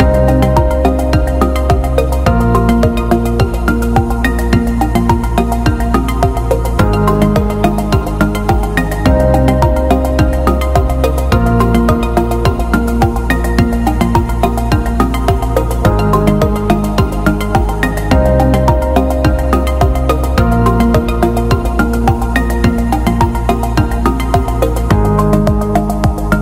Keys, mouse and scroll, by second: 0.7 space, 1.3 alt+shift+click, 2.3 click, 4.7 ctrl+click, 5.6-7.2 typing, 8.3 BackSpace, 9.7 right click, 10.7 click, 12.1 d, 12.5 alt+scroll down 1, 13.3 scroll down 1, 14.4 click, 15.1 click, 19.1-19.7 alt+scroll up 1, 20.4 shift+click, 22.5 click, 25.3 space, 26.1 click.